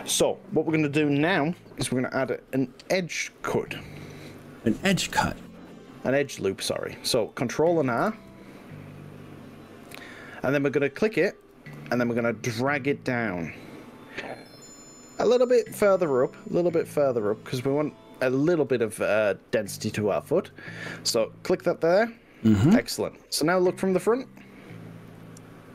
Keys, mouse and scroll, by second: 7.3 click, 8.0 ctrl+r, 20.9 click, 24.4-25.7 middle drag.